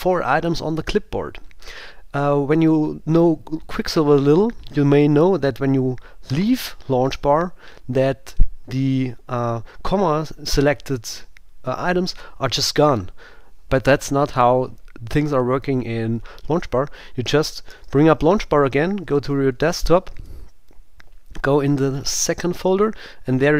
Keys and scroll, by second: 19.5 Right, 20.2 Down.